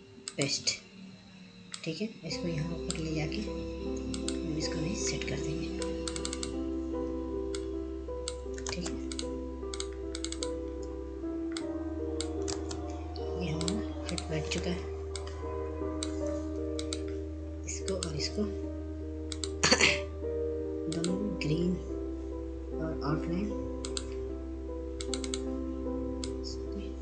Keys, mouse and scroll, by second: 5.4-13.0 drag, 13.0 ctrl+space, 13.4 click, 15.0 scroll up 1, 15.9 click, 17.1 ctrl+space, 17.4 scroll down 1, 18.0 click, 19.0 F2, 19.6-24.0 drag.